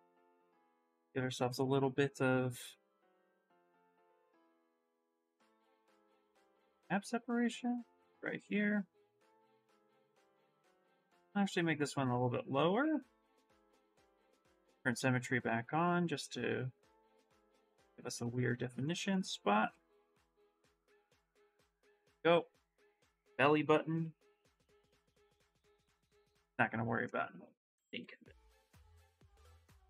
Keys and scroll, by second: 14.3 shift+x.